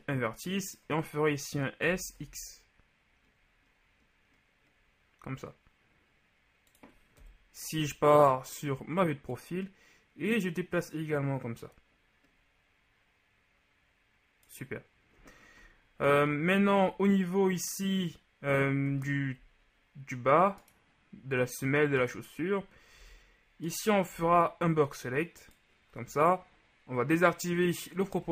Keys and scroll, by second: 2.0 s, 2.2 x, 7.3 KP_3, 23.0 z, 24.2 b.